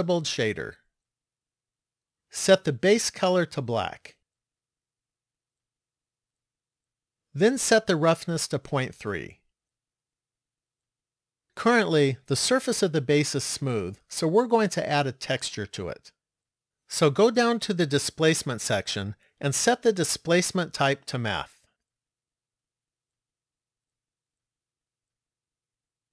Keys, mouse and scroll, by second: 3.0 click, 8.5 click, 17.1 click, 19.7 click.